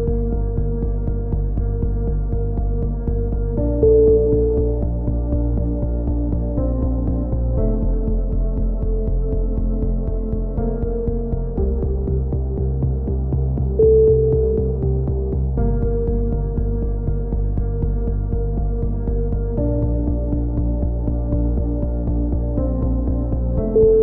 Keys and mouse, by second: 1.3-1.9 drag, 1.9 x, 2.9-3.3 drag, 3.3 ctrl+r, 5.4 z, 8.0 alt+m, 8.0 right click, 8.4 a, 8.9 ctrl+r, 10.6 z, 11.0 a, 11.4 ctrl+r, 12.6 ctrl+z, 13.4 ctrl+r, 14.3 drag, 14.3 KP_3, 14.6 z, 14.8 z, 15.1-15.7 drag, 15.9-17.3 drag, 16.2 ctrl+r, 17.7 a, 17.8 z, 17.9-18.3 middle drag, 18.0 z, 18.3 Tab, 18.6 middle drag, 19.0 Tab, 19.4 alt+h, 19.6 a, 19.8 Tab, 20.0 drag, 21.3-22.7 middle drag, 21.8 Tab, 22.0 z, 23.6 ctrl+l, 23.6 right click, 23.8 h.